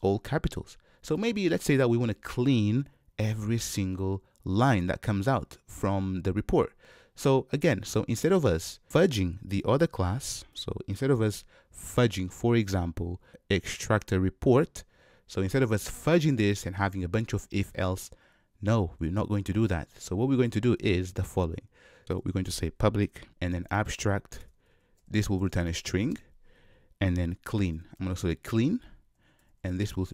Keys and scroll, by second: 23.3 Return.